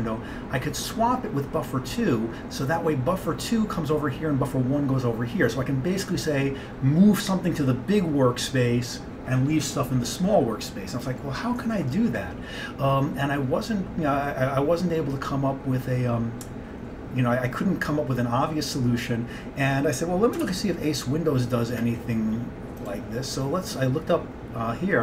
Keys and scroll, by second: 20.5 alt+Tab.